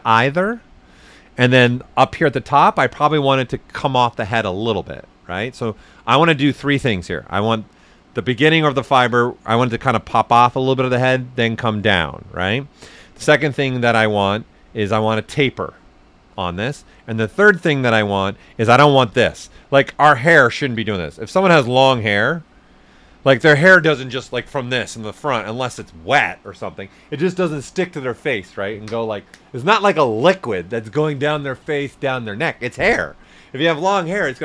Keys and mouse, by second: 13.6 ctrl+alt+Num_Lock, 13.7 ctrl+alt+right click, 18.5-20.4 right drag, 20.4 click, 21.2 right click, 21.8-23.1 drag, 23.1 right click, 25.3 alt+right click.